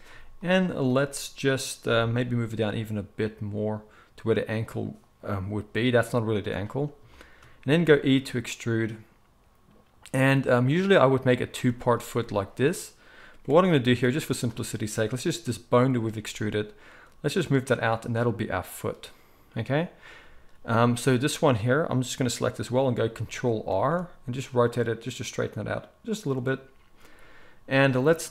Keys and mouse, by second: 2.2 g, 7.7 e, 11.4 e, 13.6 ctrl+z, 16.1 g, 18.6 click, 23.7 ctrl+r, 27.8 middle click.